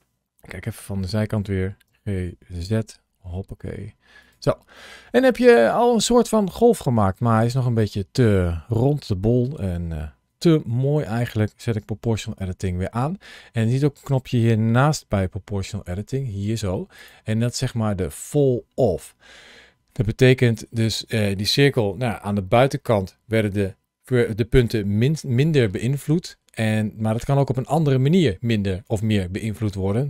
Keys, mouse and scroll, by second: 0.5 KP_3, 1.7 g, 2.5 z, 4.0 click, 4.6 middle click, 7.7 middle click, 9.8 middle click, 12.2 o.